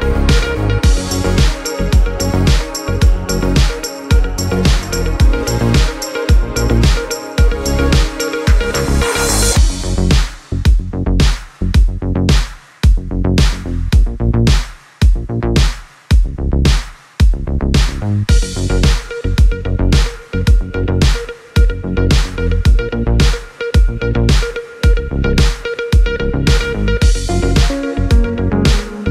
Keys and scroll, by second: 1.9 1, 2.3 6, 3.2 8, 3.6 Return, 12.8-14.3 typing, 14.6 Return.